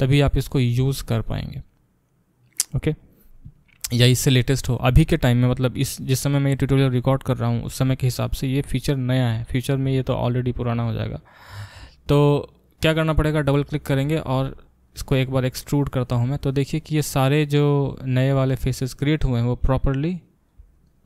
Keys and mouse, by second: 10.9-13.5 drag, 13.5 middle click, 13.6 click, 13.7-20.8 alt+middle drag, 15.0 e, 20.8-21.0 drag.